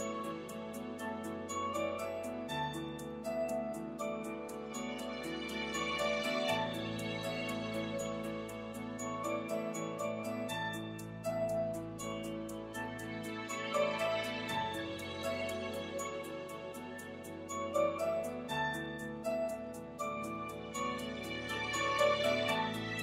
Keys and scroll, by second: 3.0 i, 4.4 3, 6.3 l, 12.6 3, 14.6 2, 16.0 i, 18.9 3.